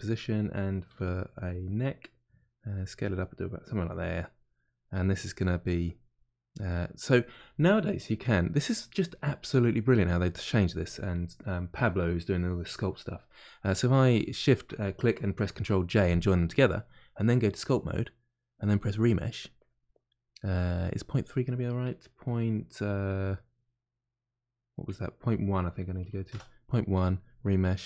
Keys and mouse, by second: 17.5 click.